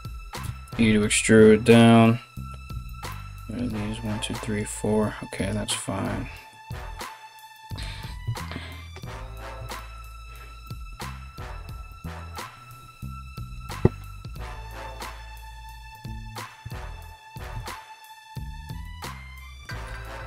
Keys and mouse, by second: 0.0 e, 7.8 KP_3, 15.5 click, 15.9 click, 16.6 shift+click, 17.2 ctrl+z, 17.7 shift+right click, 18.4 f, 20.1 ctrl+r.